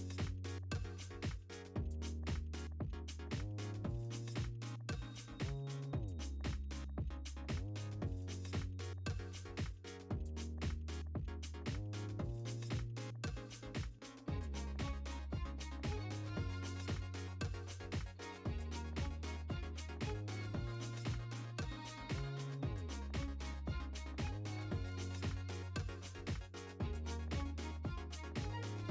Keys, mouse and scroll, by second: 2.5 scroll down 1, 3.0 scroll up 1, 3.2 alt+a, 3.4 c, 3.9 right click, 4.1-9.3 drag, 7.4 scroll down 1, 7.7 scroll up 1, 8.0 scroll down 1, 8.2 z, 8.4 `, 8.5 scroll down 1, 8.6 `, 9.0 Tab, 9.7 alt+h, 9.8 alt+a, 10.1 KP_0, 10.3 scroll up 1, 10.7 click, 11.6 Tab, 12.6 `, 13.2 `, 14.0 KP_0, 14.3-14.8 scroll up 1, 14.8 shift+click, 15.0 s, 15.4 click, 16.0 Tab, 16.1 alt+a, 16.2 z, 16.4 alt+a, 16.8 alt+click, 17.3-20.1 drag, 18.3 ctrl+z, 18.9-20.8 typing, 19.7 scroll up 1, 20.6 scroll up 1, 21.0 right click, 21.3 scroll up 1, 21.6-23.6 drag, 21.9 Tab, 22.0 z, 22.1 scroll down 1, 22.5 Tab, 23.3 Tab, 23.5 alt+a, 26.2-27.8 drag, 26.2 a, 26.5 scroll down 1, 26.6 `, 27.6 Tab, 27.9 Tab, 28.4 3, 28.6 click, 28.8 ctrl+l.